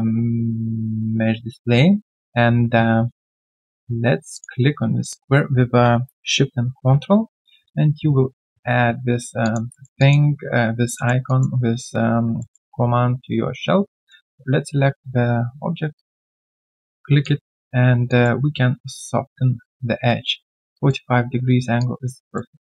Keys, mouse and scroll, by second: 4.3 ctrl+shift+click, 9.4 alt+click, 9.7 alt+middle click, 9.9 alt+click, 10.9 alt+click, 10.9 alt+middle click, 11.2 alt+click, 12.1 alt+click, 12.4 alt+middle click, 17.2 alt+click, 18.0 alt+click.